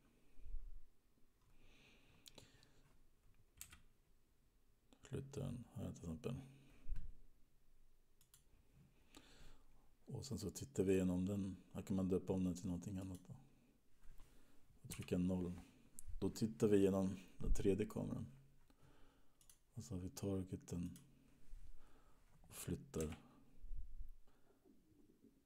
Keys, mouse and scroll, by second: 0.9-1.6 scroll down 4, 4.1 g, 11.2 click, 13.1 click, 15.1 KP_0, 19.6 click, 21.3 click, 23.4 g.